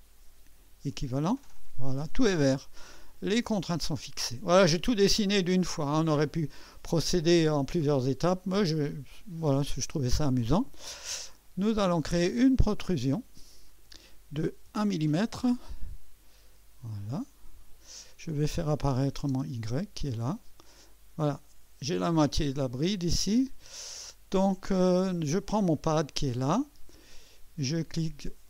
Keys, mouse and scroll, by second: 0.9 click, 3.1 click, 4.7-6.3 drag, 12.9 click, 14.7 1, 17.0 click, 18.9 click, 19.3 space, 20.2 click, 20.8-22.2 drag, 23.7 click, 25.4 click.